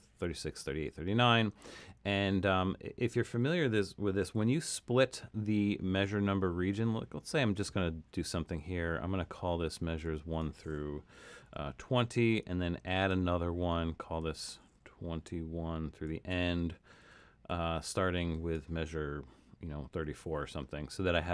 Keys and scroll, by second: 11.3-12.4 typing, 15.2-15.6 typing, 16.9-17.9 typing, 19.8-20.5 typing.